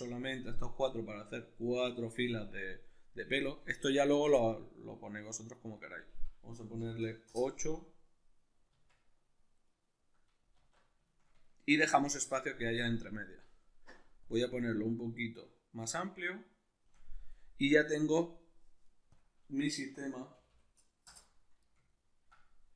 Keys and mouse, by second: 5.7-9.7 drag, 7.3 Return, 9.7-14.2 middle drag, 10.5 alt+q, 14.2-21.9 shift+drag, 20.5 0, 21.9-22.7 ctrl+middle drag.